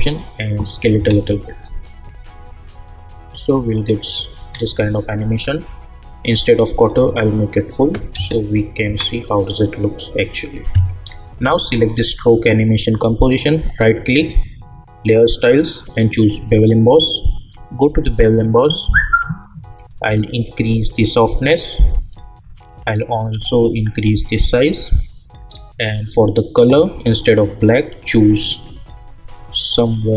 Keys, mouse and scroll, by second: 0.9 space, 4.3 space, 5.3 click, 8.1 space, 9.2 click, 13.6 right click, 16.1-25.4 drag, 25.4 scroll down 1, 26.2-30.1 drag.